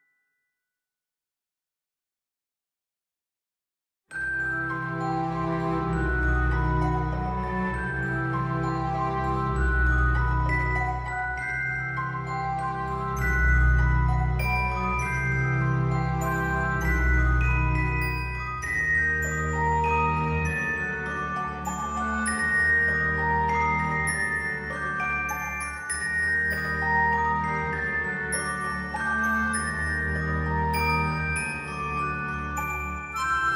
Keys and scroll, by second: 15.8 ctrl+z.